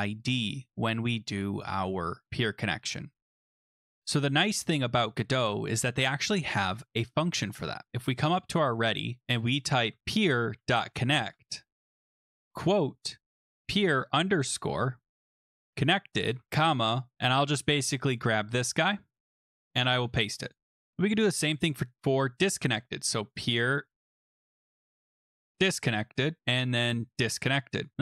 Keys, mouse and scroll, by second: 3.5-4.8 scroll down 3, 4.8 scroll down 1, 5.3-6.0 scroll down 1, 6.0-7.3 scroll down 2, 7.3-7.9 scroll down 3, 8.1 scroll, 8.1 click, 8.6 Return, 9.6-16.3 typing, 19.1 click, 19.3 ctrl+c, 19.7 click, 20.0 ctrl+v, 20.5 click, 20.8 ctrl+c, 20.9 ctrl+v, 21.6 click, 21.7 click, 23.5 click, 23.6 click, 24.0 click, 24.5 click, 24.6 click, 24.9-27.6 typing, 26.4 click, 27.9 click.